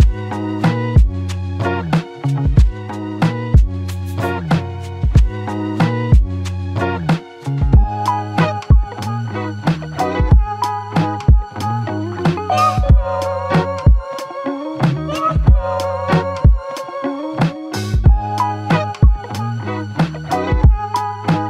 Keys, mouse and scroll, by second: 13.6 Tab, 14.4 alt+click.